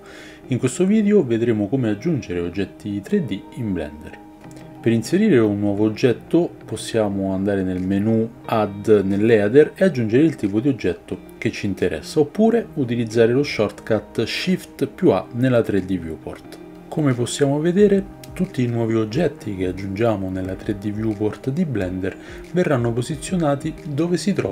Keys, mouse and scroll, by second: 5.8-16.5 drag, 13.3 shift+a, 16.3 ctrl+z, 16.3 shift+c, 16.5-19.0 shift+middle drag, 17.0 right click, 17.3 shift+a, 19.0 shift+right drag, 19.1-24.5 shift+middle drag, 19.6 shift+a, 21.6 shift+right click, 22.0 shift+a.